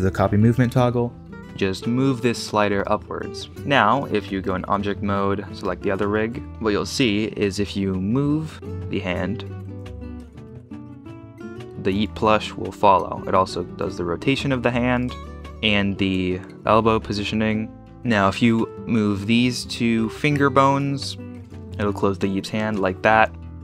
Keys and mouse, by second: 1.9 g, 2.8-3.2 drag, 3.9-4.8 drag, 6.5 ctrl+Tab, 8.9 g, 12.1 click, 12.5 r, 12.9 r, 14.2 r, 15.1 click, 15.4 g, 15.6 g, 18.5 click, 21.2 r.